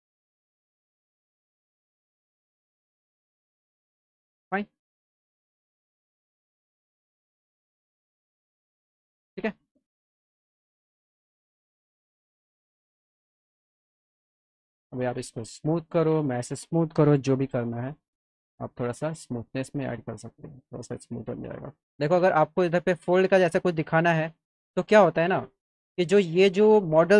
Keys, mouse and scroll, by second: 0.6 middle click, 1.3-3.1 drag, 3.5 click, 4.2 alt+middle click, 5.2 click, 5.7 ctrl+click, 6.5 click, 7.6 click, 8.1 alt+middle click, 8.3 alt+click, 10.5 click, 11.2 click, 14.1 click, 15.1 ctrl+click, 16.2 click, 19.0 click, 20.0 click, 20.7 alt+middle click, 24.1-25.2 middle drag.